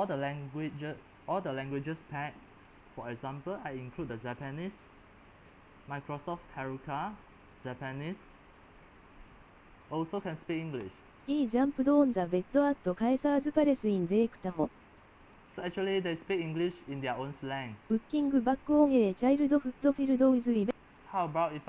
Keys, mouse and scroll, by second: 0.0-4.2 middle drag, 4.2-21.6 drag.